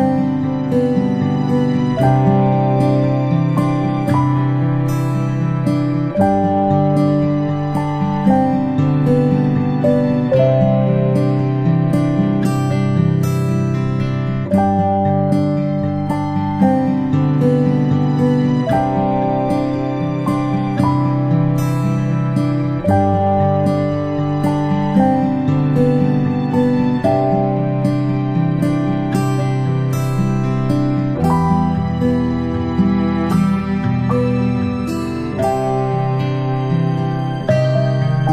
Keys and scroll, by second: 0.7 space, 20.1 ctrl+c, 20.3 ctrl+v, 24.2 ctrl+[, 24.3 ctrl+[, 24.4 ctrl+[, 24.6 ctrl+[, 24.6 ctrl+shift+], 24.8 ctrl+shift+], 25.3 ctrl+[, 25.5 ctrl+[, 25.6 ctrl+], 25.7 ctrl+], 29.2 ctrl+[, 29.4 ctrl+], 29.5 ctrl+].